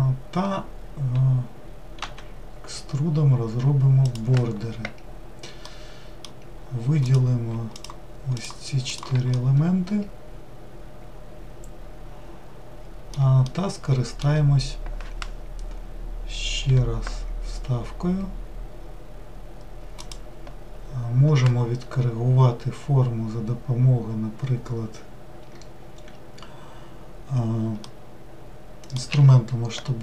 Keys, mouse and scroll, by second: 5.7-7.1 middle drag, 7.1 click, 7.8 shift+click, 8.3 shift+click, 8.9 shift+click, 9.3-12.3 middle drag, 13.5-16.6 shift+middle drag, 27.8-29.1 middle drag, 29.1 s.